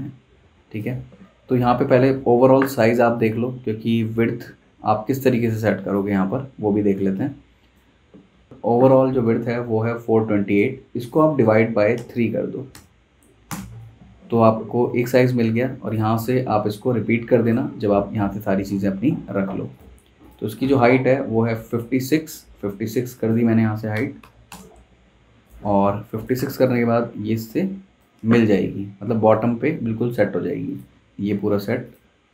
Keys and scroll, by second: 12.0-12.7 typing, 13.5 Return, 14.5 v, 23.9 typing, 24.5 Return, 25.6 z, 25.8 z, 26.3 v.